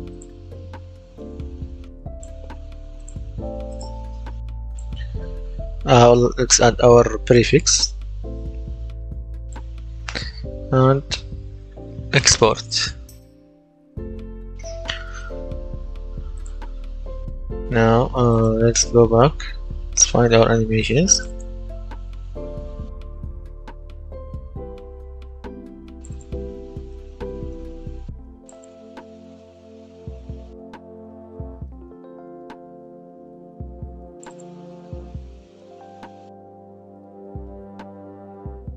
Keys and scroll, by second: 5.3 shift+s, 6.2 shift+-, 23.4 a, 23.8 w, 26.9 s, 29.3 d, 29.6 w, 30.5 s, 35.5-37.8 typing.